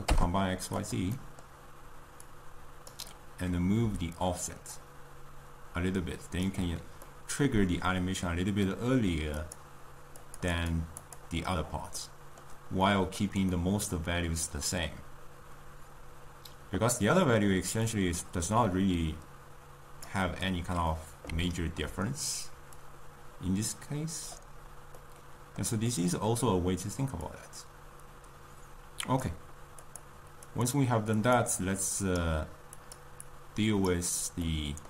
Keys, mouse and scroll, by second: 7.1-9.5 middle drag, 9.5 click, 10.5 click, 24.4 click, 27.5-34.8 drag.